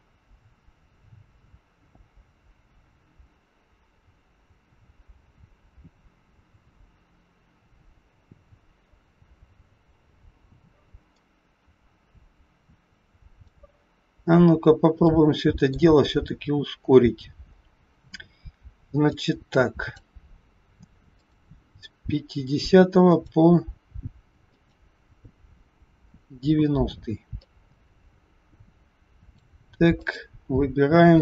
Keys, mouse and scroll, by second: 13.6-14.5 scroll up 9, 15.0 middle click, 15.0 scroll up 1, 17.4-18.0 scroll up 3, 19.1 click, 21.0 click, 27.4 click, 30.0 click.